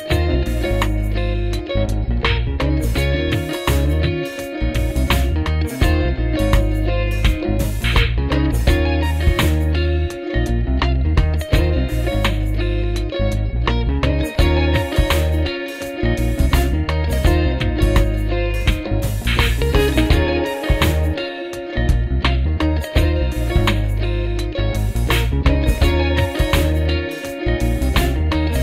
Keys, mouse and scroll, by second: 0.8 space, 16.0 alt+click, 17.5 space, 24.4 l, 28.2 double click.